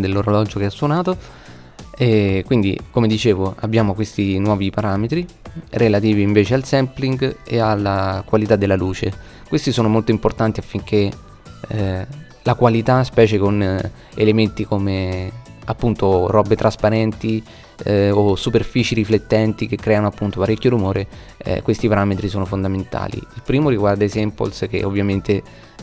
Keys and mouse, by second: 6.0-8.1 middle drag, 9.4-12.0 middle drag, 22.9-24.7 middle drag.